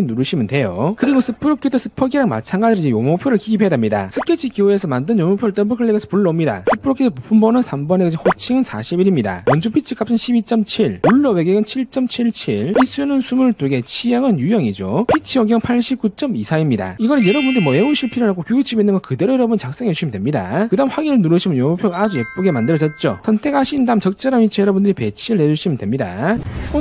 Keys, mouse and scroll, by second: 0.7 click, 5.8 click, 6.0 click, 22.0 click, 23.7 click, 24.1-24.6 scroll down 2, 25.1-26.3 drag.